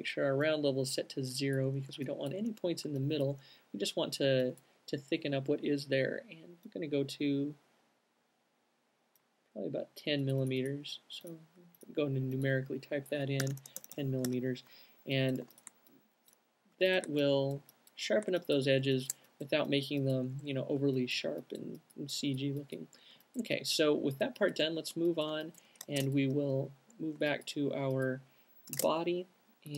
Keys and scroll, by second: 13.5-17.0 typing, 18.7-21.7 typing, 22.9-23.7 typing, 25.0 alt+shift+space, 29.0 space.